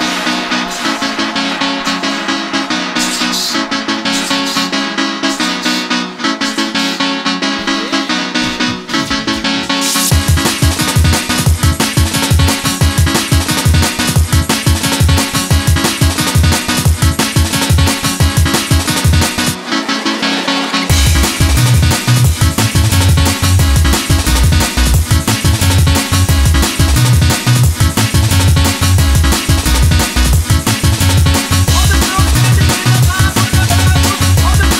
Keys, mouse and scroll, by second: 2.4 s, 4.7-6.0 drag, 5.8 g, 6.4 click, 6.8-8.5 drag, 12.6 s, 13.8-14.4 drag, 14.4 s, 15.5 s, 16.8 s, 17.6 s, 18.6-21.6 drag, 18.9 s, 20.2 s, 21.4 s, 22.3 click, 22.6 s, 23.9 s, 25.0 s, 26.6 s, 28.9-30.2 drag, 30.0 g.